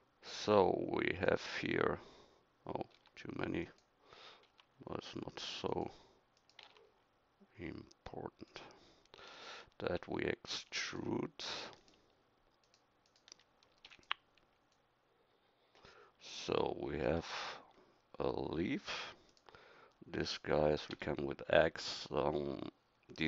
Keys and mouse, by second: 2.9 b, 4.4 g, 6.6 g, 13.9 e, 20.9 x.